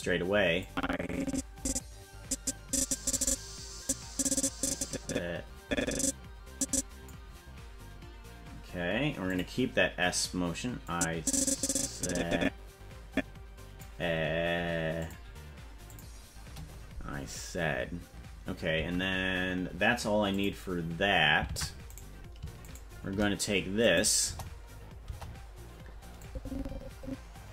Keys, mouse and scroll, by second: 0.6-7.1 drag, 9.3 click, 10.9-13.9 drag, 15.0 click, 15.9 click, 18.8 ctrl+Tab, 20.3 click, 21.5 ctrl+Tab, 22.0 right click, 23.8 click, 24.2 KP_0, 25.0 KP_0, 26.2-27.5 drag.